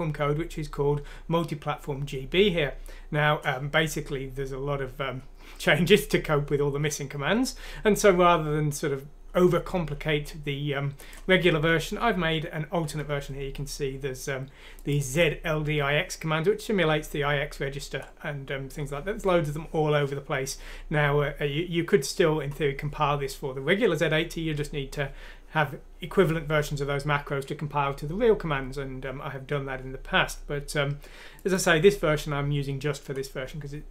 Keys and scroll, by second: 12.0 Page_Down, 12.2 Page_Down, 12.9 Page_Up.